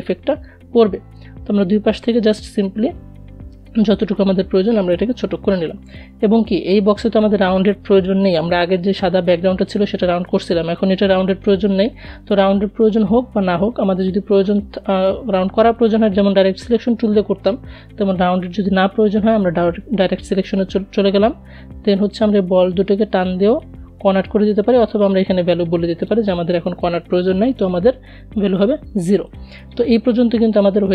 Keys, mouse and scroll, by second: 0.5 alt+Num_Lock, 2.3-16.2 alt+drag, 16.3 click, 21.1-24.1 drag, 27.5 click, 30.1-30.9 drag.